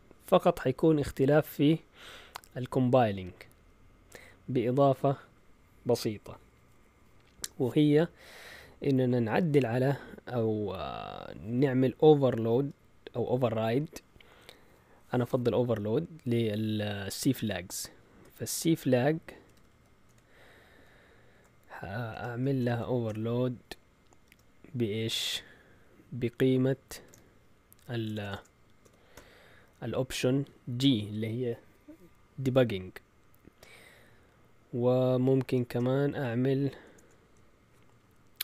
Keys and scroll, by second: 12.4 space, 18.4-20.7 typing, 22.1-23.0 typing, 24.2 typing, 26.8-29.1 typing, 35.6 Return, 36.9 BackSpace.